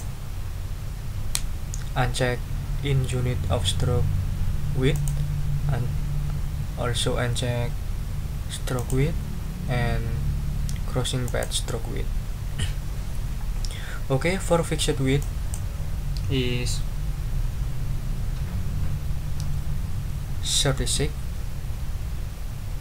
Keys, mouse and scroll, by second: 4.9 click, 8.7 click, 11.2 click, 15.2 click, 20.5-21.4 typing.